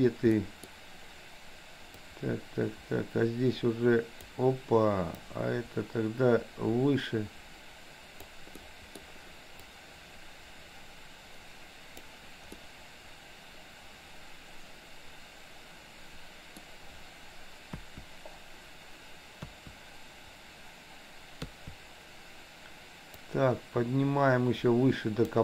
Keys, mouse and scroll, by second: 0.3 scroll up 1, 0.5 middle click, 2.0-4.5 drag, 5.2-8.3 drag, 8.6 scroll up 1, 8.7 middle click, 9.8-12.2 drag, 12.6-16.7 middle drag, 17.7 KP_1, 19.5 KP_1, 21.5 KP_3, 23.2-25.4 drag.